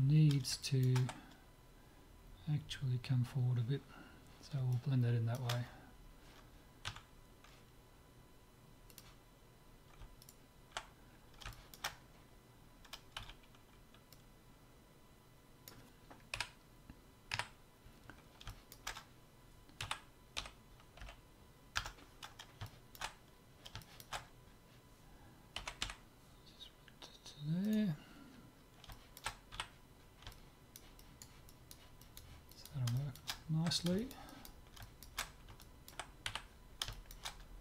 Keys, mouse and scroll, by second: 0.6-2.6 middle drag, 4.7-6.5 middle drag, 6.8 Tab, 7.7 Tab, 8.9-10.5 drag, 10.2-11.7 right drag, 11.1-13.2 middle drag, 13.2 z, 14.1-15.9 drag, 16.3 KP_7, 17.4 KP_Decimal, 18.0-20.3 middle drag, 19.8 s, 22.3-26.5 middle drag, 25.7 g, 28.0-29.1 middle drag, 29.5 z, 30.3 middle click, 31.7-36.9 middle drag, 36.3 z.